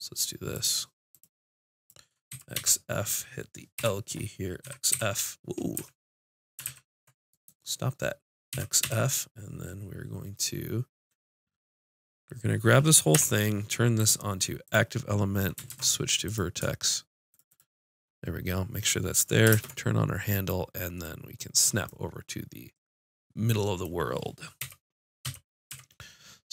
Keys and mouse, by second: 2.3 x, 3.7 l, 4.6 z, 4.9 f, 5.7 z, 6.6 ctrl+z, 8.5 x, 13.1 l, 13.9-15.7 drag, 15.7 ctrl+Tab, 17.3-19.4 drag, 19.5 ctrl+space, 22.0 click, 24.6 KP_7, 25.2 KP_5, 25.7 z.